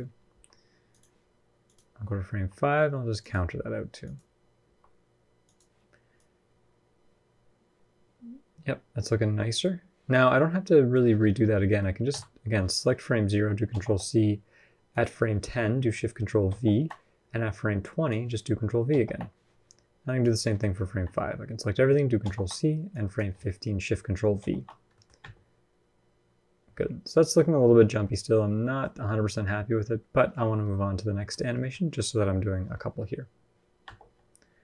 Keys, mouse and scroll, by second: 1.4 click, 2.1 r, 3.3 r, 4.4 r, 5.9 click, 11.1 scroll down 3, 11.2 middle click, 11.9 a, 13.5 ctrl+c, 14.7 click, 16.3 ctrl+shift+v, 17.6 click, 18.7 ctrl+v, 19.8 click, 20.7 a, 22.0 ctrl+c, 22.7 click, 24.2 ctrl+shift+v, 24.7 middle click, 25.0 space, 27.6-28.1 scroll down 4, 27.8 middle click, 28.1-29.2 scroll up 4, 28.4 middle click, 29.3-29.7 scroll down 1, 30.5 middle click, 31.2 scroll down 1, 31.4 middle click, 33.6 space.